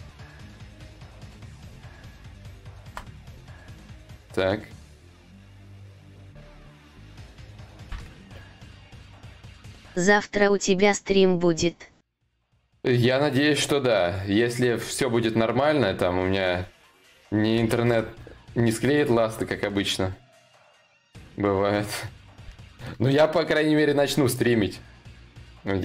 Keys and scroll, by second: 2.2 ctrl+z, 17.1 ctrl+y, 17.3 ctrl+z.